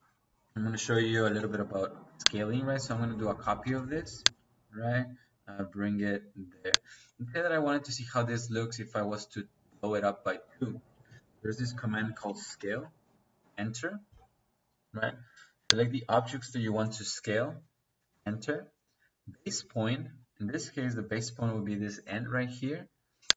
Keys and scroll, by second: 0.6-1.5 typing, 3.6 space, 6.8 Escape, 10.3 Escape, 12.0-13.3 typing, 18.0 space.